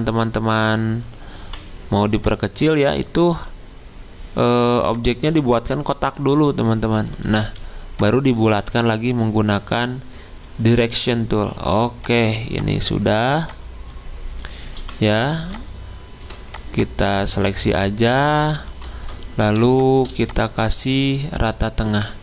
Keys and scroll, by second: 1.4 v, 7.4 a, 11.4 typing, 14.7 v, 18.7 ctrl+g, 19.6 ctrl+2.